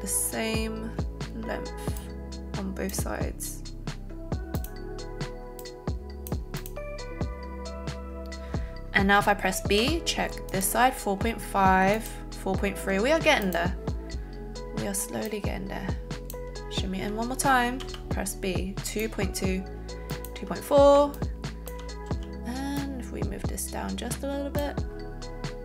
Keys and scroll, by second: 9.8 b, 12.9 a, 17.9 b, 22.0 alt+z.